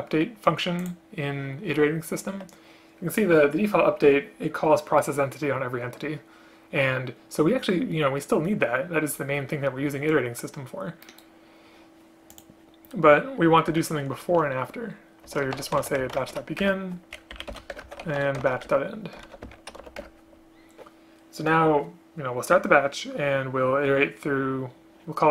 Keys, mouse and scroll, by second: 13.8 Return, 16.8 Return, 17.5 Down, 17.6 End, 17.9 Return, 18.8 Return, 19.4 ctrl+z, 20.1 Return.